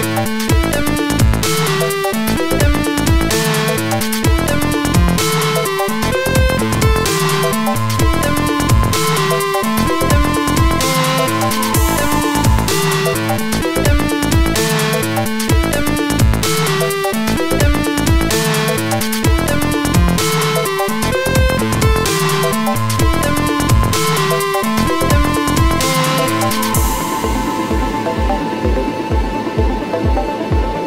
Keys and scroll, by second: 5.8 ctrl+t.